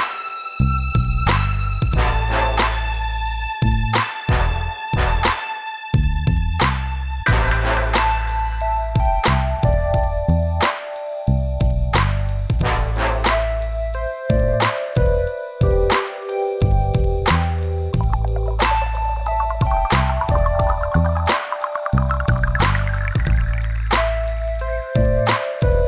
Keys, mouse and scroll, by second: 1.4 click, 3.0 click, 4.2 click, 8.5 alt+Delete, 8.8 alt+Delete, 9.4 middle click, 10.3 click, 13.1 scroll up 1, 15.5 click, 21.7 click, 22.5 click, 23.4 click, 23.7 h, 23.8 click, 24.0 h, 25.4 Return.